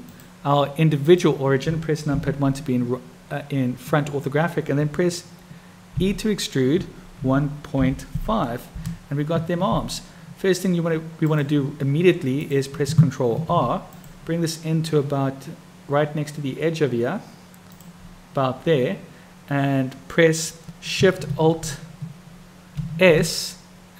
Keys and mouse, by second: 0.1-1.2 drag, 2.2 KP_1, 11.2 click, 13.5 ctrl+r, 22.8 alt+shift+s.